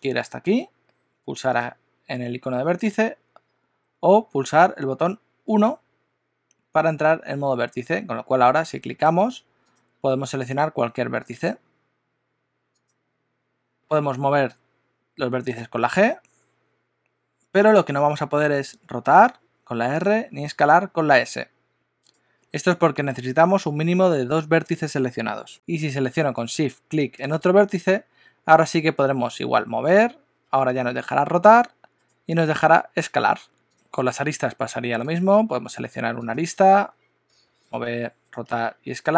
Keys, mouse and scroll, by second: 1.7 click, 5.5 1, 8.4 click, 9.7 click, 11.4 click, 12.8 click, 15.6 g, 18.8 r, 20.6 s, 25.5 Tab, 27.1 shift+click, 29.1 g, 30.5 r, 32.5 s, 34.4 2, 35.0 click, 36.4 click, 37.3 g, 37.9 r, 38.5 s.